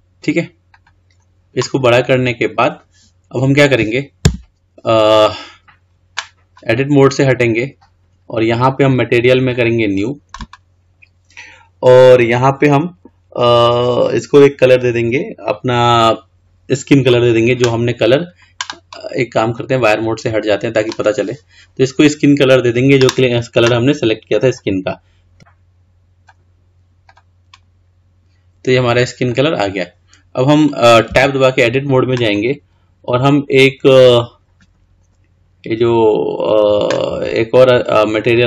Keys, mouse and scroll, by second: 4.5 Tab, 9.7-12.7 drag, 17.9-20.5 scroll down 6, 20.5 click, 24.7 click, 27.3 drag, 29.4 click, 31.3 Tab.